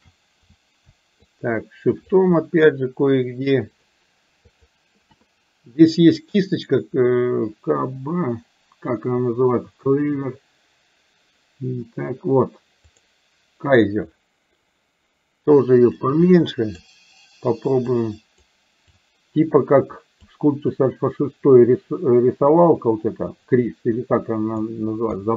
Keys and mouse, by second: 1.2-2.2 shift+drag, 2.4-3.9 shift+drag, 4.6 shift+click, 13.0 click, 16.2 click, 18.0 click, 19.0-20.4 drag, 20.7-24.7 drag, 25.2-25.3 middle drag.